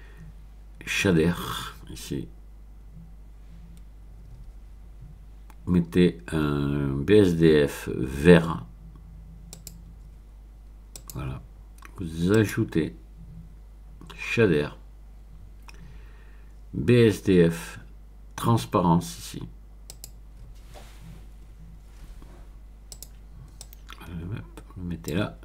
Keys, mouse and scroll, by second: 9.5 click, 10.9 click, 12.3 click, 19.9 click, 22.9 click, 23.6-25.4 drag.